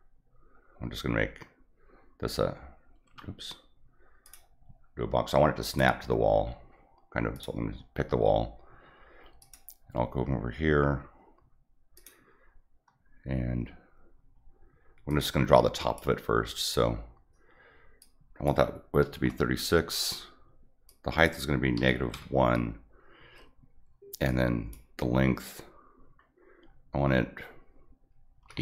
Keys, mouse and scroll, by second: 3.0 Escape, 4.2 click, 5.7 click, 6.5 scroll up 1, 7.3 click, 9.4 click, 11.9 click, 15.1 click, 18.0 click, 20.9 click, 24.3 click.